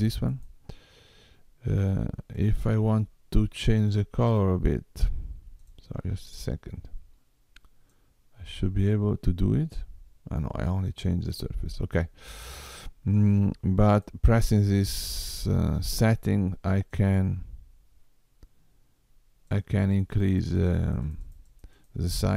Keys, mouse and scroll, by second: 1.1 click, 5.1 click, 6.6 click, 15.1 click, 20.6-22.3 click, 21.5 click.